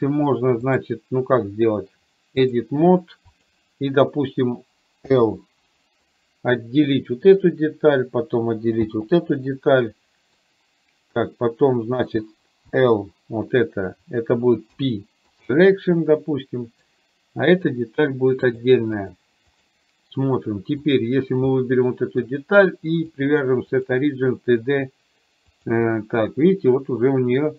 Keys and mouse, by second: 0.8-2.8 drag, 3.4 click, 6.1-7.6 middle drag, 9.6 middle click, 16.1 middle click, 18.4 click, 19.1 click, 20.9 click, 21.7 middle click, 23.3-25.8 drag.